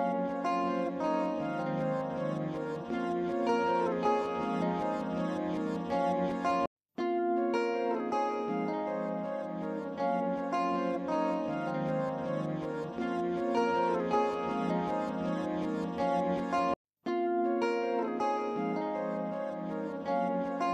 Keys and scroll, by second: 6.4 ctrl+z.